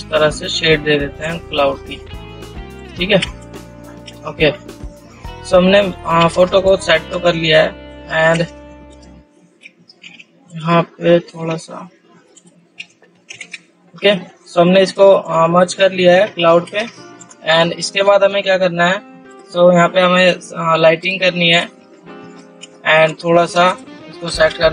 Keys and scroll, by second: 4.6 ctrl+space, 5.0 ctrl+0, 5.7 ctrl++, 10.4 ctrl+z, 13.7 ctrl+0, 16.4 ctrl++.